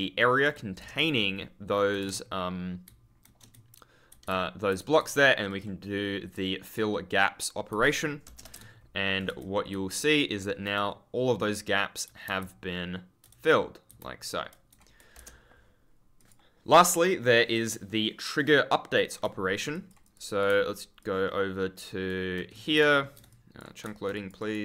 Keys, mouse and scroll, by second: 0.1 ctrl+click, 0.2 ctrl+scroll up 1, 0.7 Return, 1.1 ctrl+click, 1.9 a, 2.8 shift+w, 4.0 d, 4.6 ctrl+s, 5.4 click, 6.6 click, 7.6 w, 8.2 Return, 8.5 a, 9.2 ctrl+a, 10.7-11.8 ctrl+scroll down 1, 12.0 ctrl+d, 12.3 ctrl+space, 12.4 ctrl+s, 13.9 ctrl+space, 16.1 click, 18.9 click, 19.6 click, 20.9 ctrl+click, 21.0-21.5 scroll up 1, 22.4 scroll up 1, 22.4-23.2 typing, 23.2 click, 24.1 click.